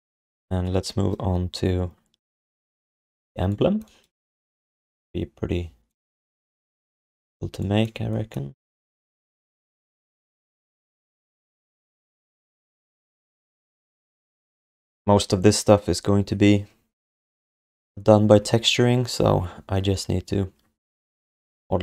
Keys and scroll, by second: 4.5 ctrl+s.